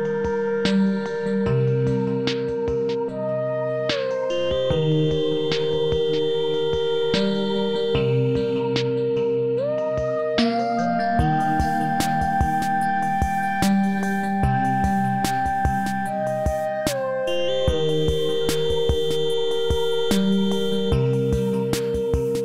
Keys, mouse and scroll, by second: 1.6 scroll up 1, 4.2-4.8 alt+middle click, 4.7 scroll down 1, 6.7 scroll up 1, 7.0-7.5 alt+middle drag, 7.5-8.3 scroll up 2, 8.3-9.1 scroll up 1, 9.1 scroll up 1, 16.7 click.